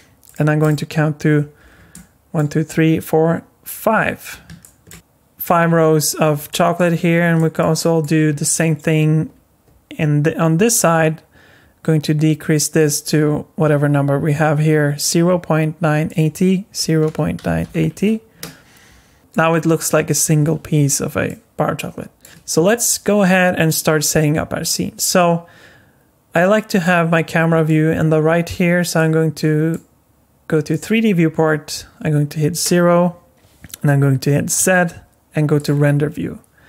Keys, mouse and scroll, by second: 0.6 click, 1.5 scroll down 4, 1.9 middle click, 3.6 click, 4.6 shift+middle click, 4.9 scroll up 2, 6.5 middle click, 7.0 scroll up 3, 7.4 middle click, 7.8 shift+middle click, 8.2 scroll up 2, 16.1 click, 19.3 middle click, 19.3 scroll down 3, 21.2 middle click, 22.3 middle click, 26.8 click, 29.0 click, 32.5 KP_0, 33.3 z, 34.6 z.